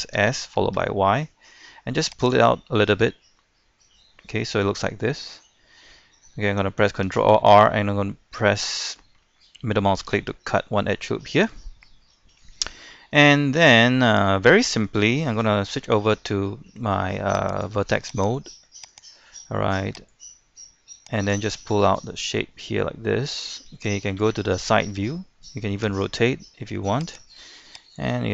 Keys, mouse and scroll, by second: 0.2-0.7 typing, 2.2 click, 2.5-6.1 middle drag, 7.1 ctrl+r, 10.6 middle click, 12.8 scroll up 1, 13.1 scroll down 1, 13.5 shift+middle click, 14.4-15.2 scroll up 1, 16.2 ctrl+Tab, 17.5 click, 18.3 right click, 18.9 shift+right click, 20.1-21.5 drag, 21.5-23.3 middle drag, 24.2 KP_3, 25.8 r, 27.0-28.3 drag.